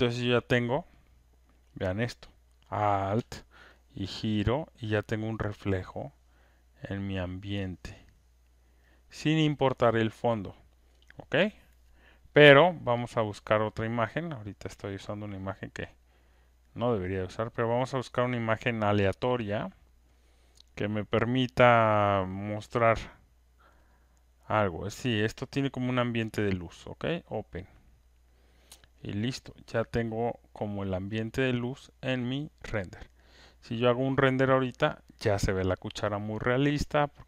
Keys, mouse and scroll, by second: 3.1 click, 10.9-13.0 alt+drag, 14.4 click, 14.9 click, 15.8 alt+click, 16.0 click, 18.1 click, 19.6 click, 20.1 click, 21.9 click, 22.8 click, 23.9 click, 24.9 click, 25.8 click, 27.1 click, 29.6 alt+scroll, 30.3 alt+middle click, 30.7 alt+right click, 32.2 click, 33.8-35.8 drag, 33.8 alt+scroll.